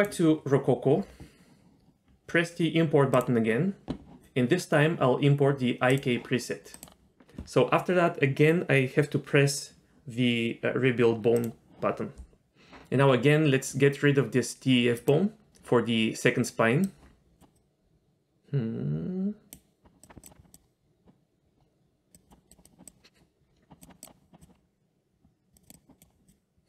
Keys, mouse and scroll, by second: 0.0 click, 1.0-3.0 scroll down 1, 3.1 click, 11.4-12.3 drag, 14.9 click, 16.8 click, 17.5-19.7 drag, 20.0 click, 20.5 click, 22.1 drag, 22.5 drag, 22.8 click, 23.8 click, 24.4-25.1 drag, 25.5 click, 25.6-26.0 drag.